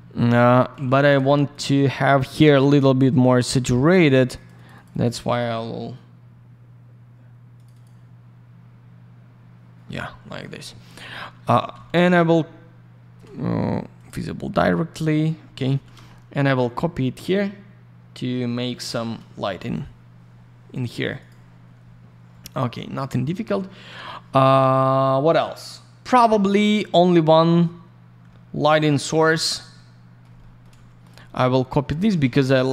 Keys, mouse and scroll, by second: 0.6 alt+middle click, 0.7 alt+я, 0.9 click, 1.5 click, 1.6 click, 3.8 click, 3.9 click, 4.1 click, 4.2 click, 4.3 click, 4.4 double click, 4.5 click, 4.6 click, 4.7 click, 4.8 double click, 4.9 click, 5.0 click, 7.5 click, 7.6 click, 7.7 click, 7.8 click, 11.3 alt+middle click, 13.9 click, 14.0 click, 16.5 shift+click, 21.1 click, 21.2 click, 26.4 alt+middle click, 29.0 alt+middle click, 29.2 alt+r, 29.4 click, 29.7 alt+middle click, 30.4 middle click, 31.0 click, 31.1 click, 31.9 alt+middle click.